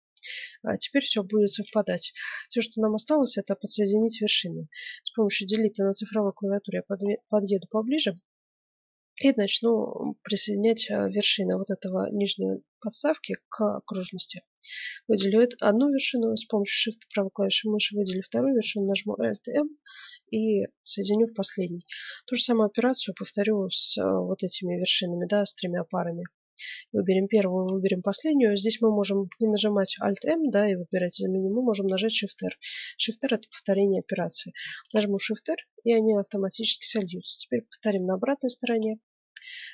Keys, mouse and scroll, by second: 1.4-2.1 scroll up 1, 1.5 ctrl+Tab, 2.1 middle click, 2.3-4.2 right drag, 5.4 KP_Decimal, 6.2-9.0 middle drag, 9.4 middle click, 16.0-18.0 right drag, 18.7 alt+m, 20.4-23.8 middle drag, 26.5-29.1 right drag, 34.8 shift+r, 35.3-37.8 middle drag, 37.8-39.7 right drag.